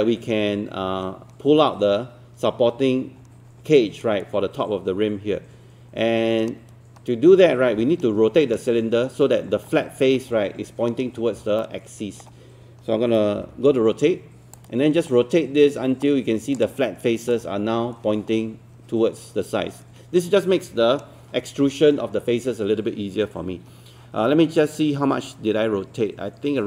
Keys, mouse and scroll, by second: 11.2 scroll down 1, 11.6 alt+middle click, 13.4 e, 14.6-16.6 drag.